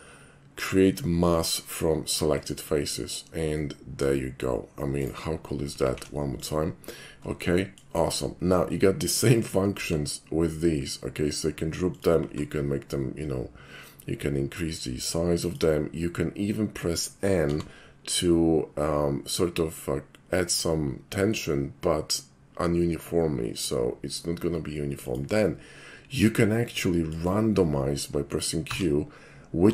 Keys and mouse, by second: 2.4 click, 3.6 middle click, 5.0 right click, 5.9 alt+shift+c, 6.3 click, 7.4-7.8 shift+middle drag, 9.8 d, 11.9 click, 12.2 s, 15.4 click, 17.5 n, 25.0 click, 26.7-27.1 shift+middle drag, 28.6 q.